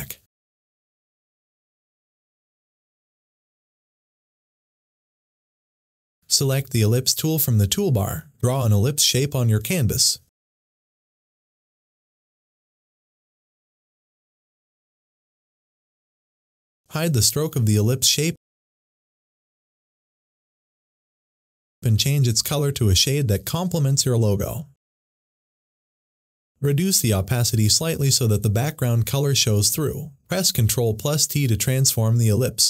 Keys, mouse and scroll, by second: 0.5 click, 5.0 click, 7.1-14.8 drag, 17.4 click, 17.5 click, 30.7-32.6 drag.